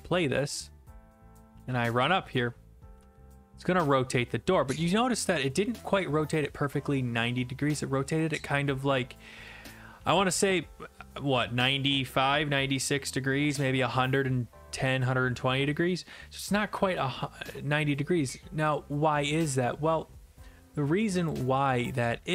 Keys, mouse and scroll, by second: 0.2 click, 1.5-9.0 typing, 10.4-12.3 typing, 15.2 a, 17.4 alt+F4, 18.7 click, 19.6 click, 21.3 click.